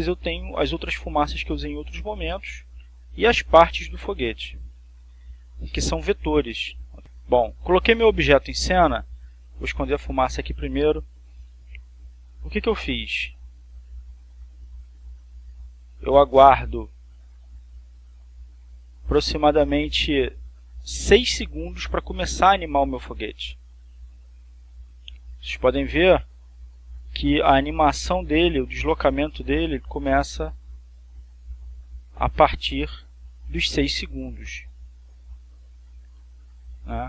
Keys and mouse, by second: 3.8 click, 5.8 click, 6.8 click, 7.5 click, 10.5 click, 12.1-24.6 drag, 25.3 click, 27.1-37.0 drag.